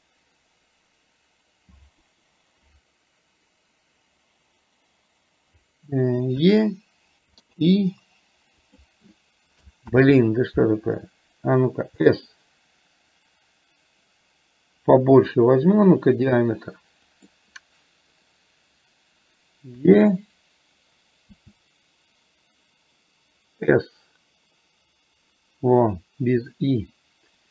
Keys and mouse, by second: 10.1 ctrl+z, 12.1 s.